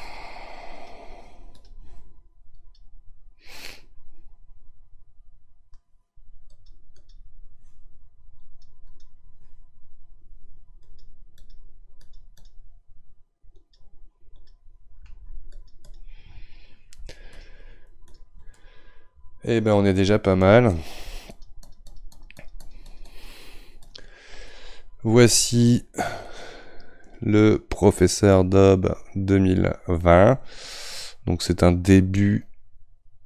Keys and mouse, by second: 3.7-6.6 middle drag, 6.6-18.6 drag, 18.6-20.4 middle drag, 20.4-24.4 shift+drag, 24.4-29.3 middle drag, 33.1-33.2 drag.